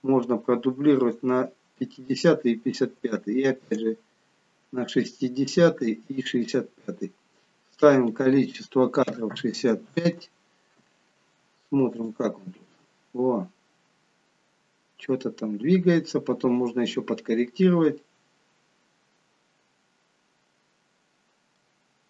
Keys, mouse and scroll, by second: 3.6 shift+d, 7.7 click, 12.0 click, 20.7-21.7 scroll down 1, 21.7 middle click, 21.7 scroll down 2.